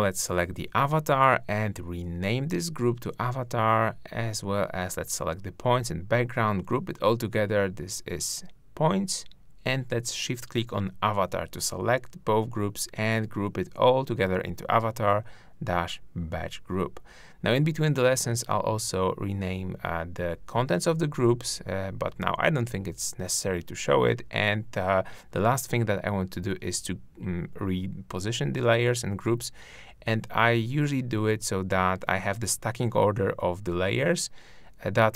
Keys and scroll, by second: 6.7 super+g, 10.4 super+Return, 11.6 super+g.